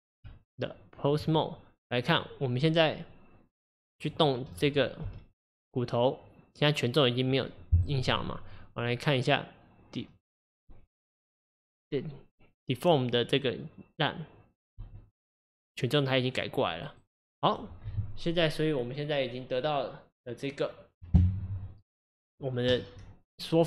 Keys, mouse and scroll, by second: 0.3 Tab, 2.1 click, 4.0 click, 5.1 g, 8.8 click, 9.3 click, 14.9 g.